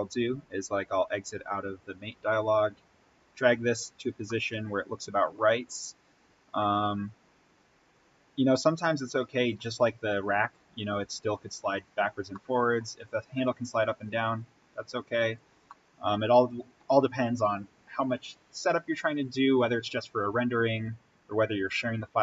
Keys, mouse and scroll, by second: 2.6-4.3 drag, 4.3 middle click, 5.3-6.6 scroll down 1, 6.6-8.7 drag, 8.7-9.0 scroll up 1, 9.0-11.9 middle drag, 12.6 middle click, 13.3-15.7 drag, 15.6 middle click, 15.7-21.8 middle drag.